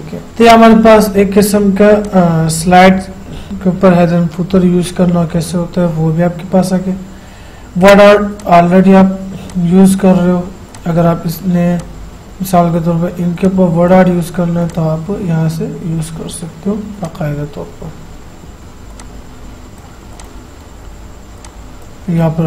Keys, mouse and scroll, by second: 0.3 click, 8.6-14.9 drag, 17.2-22.4 drag.